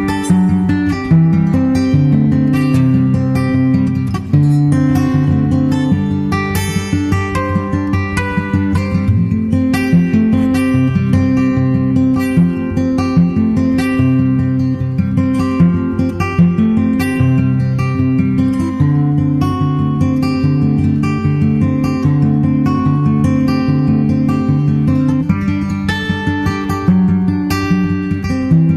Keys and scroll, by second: 7.0 super+Left, 7.5 super+Right, 15.2 super+s, 25.6 super+s, 26.4 super+/, 27.8 super+z, 28.5 super+z.